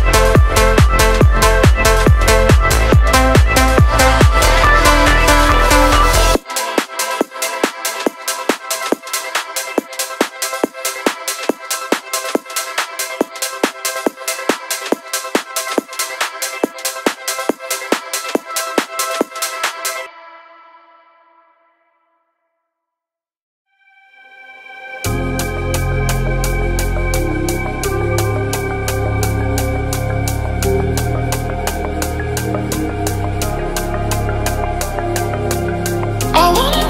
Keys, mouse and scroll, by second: 0.3 click, 2.8 click, 2.8 shift+a, 4.0 click, 4.7 ctrl+t, 5.0 middle click, 6.7-7.3 drag, 7.7 middle click, 8.7-9.4 drag, 10.5-11.4 drag, 11.7 middle click, 13.2-14.4 drag, 14.8 middle click, 15.5-16.0 scroll up 4, 16.3-17.1 shift+middle drag, 18.9 click, 19.7 click, 25.7 KP_6, 29.6 click, 30.0 click, 31.5-31.9 scroll down 1, 32.7-33.1 scroll down 1, 34.6 click, 34.8 middle click.